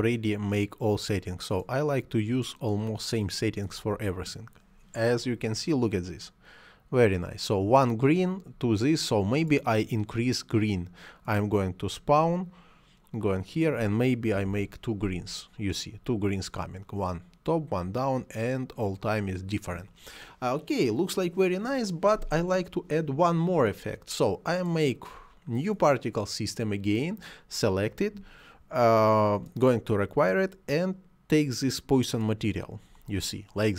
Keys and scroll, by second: 14.1 2, 14.2 Return.